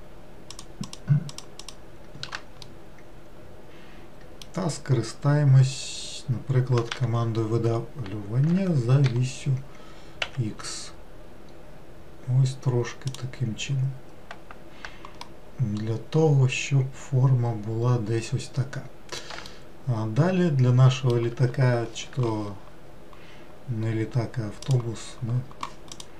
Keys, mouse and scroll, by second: 0.5 shift+click, 0.9 shift+click, 1.3 shift+click, 1.6 shift+click, 2.7-5.8 middle drag, 6.9 e, 15.3-18.4 middle drag, 19.5-22.5 shift+middle drag.